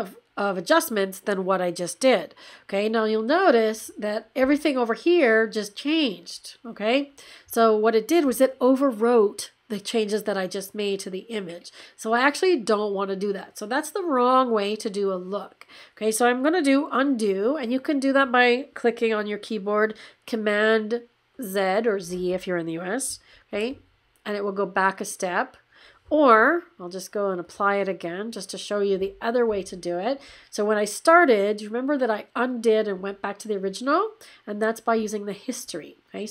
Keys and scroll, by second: 23.3 super+z.